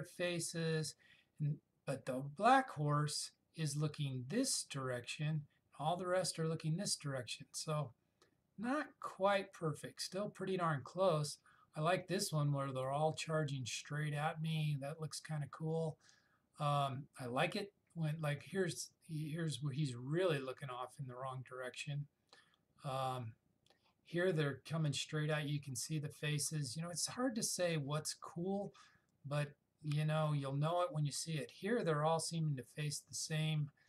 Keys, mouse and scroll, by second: 13.0 click, 15.0-16.1 scroll up 1, 22.4-22.9 scroll down 1, 28.3-30.2 scroll down 1.